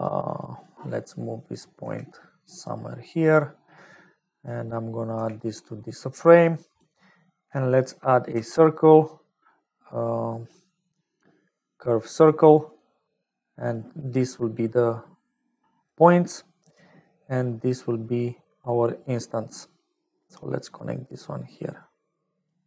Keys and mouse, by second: 0.4 click, 1.2 click, 1.7 g, 2.9 click, 4.2 click, 5.1 g, 6.0 click, 7.4 click, 8.3 shift+a, 13.7-15.8 drag, 16.2 click, 17.9 middle click, 20.2-22.5 drag.